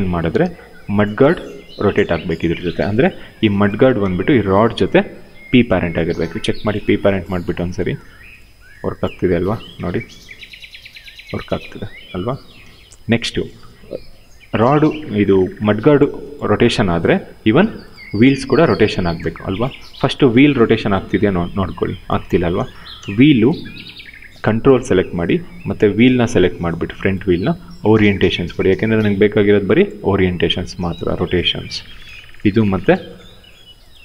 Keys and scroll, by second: 2.2 q, 5.9 p, 8.8 e, 12.4 ctrl+z, 18.9 ctrl+z, 21.9 ctrl+z, 22.6 w.